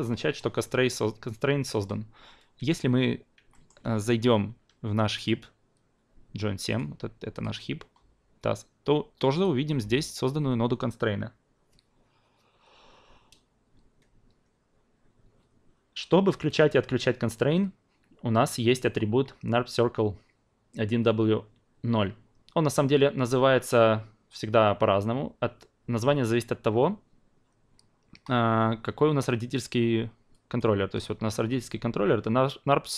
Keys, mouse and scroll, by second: 2.5 f, 3.5 alt+middle click, 5.1 click, 6.7 click, 7.3 click, 9.3 click, 18.8 click, 30.3-32.9 drag.